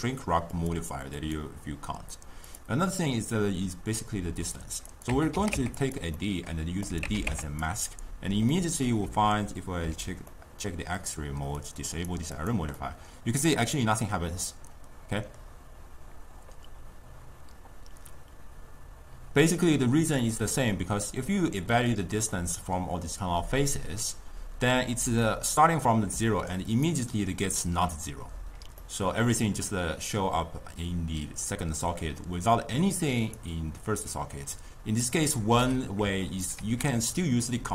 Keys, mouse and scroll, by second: 0.6 click, 1.2-6.0 drag, 6.2 middle click, 6.9 click, 8.6-9.9 middle drag, 9.9 alt+z, 10.4-11.7 middle drag, 11.7 click, 12.0 click, 12.4 click, 12.8-15.8 middle drag, 20.2-25.2 middle drag, 25.2 click, 25.5 d, 25.7 click, 25.9 d, 26.3 click, 26.9-28.5 d, 28.9-31.9 middle drag, 32.5 drag, 34.6-35.7 drag, 35.7-36.6 middle drag, 36.6 ctrl+a.